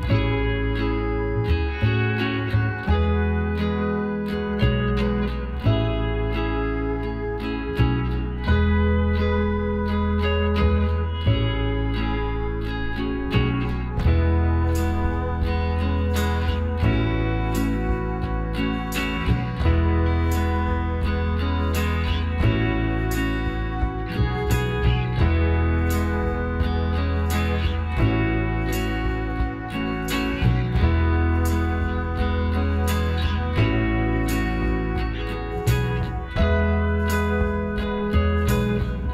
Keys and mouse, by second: 1.8 z, 4.1-5.7 drag, 5.0 Tab, 5.7 Tab, 6.0-7.8 right drag, 7.2 m, 9.6-12.7 middle drag, 11.4-12.7 right drag, 11.7 Tab, 13.3 middle click, 16.9-18.5 middle drag, 18.0-19.7 drag, 19.4-20.9 right drag, 21.1 g, 22.3-24.4 middle drag, 24.4-26.2 right drag, 25.3 g, 27.0-28.8 middle drag, 28.8-31.4 drag, 30.9 j, 32.4 k, 36.5 click.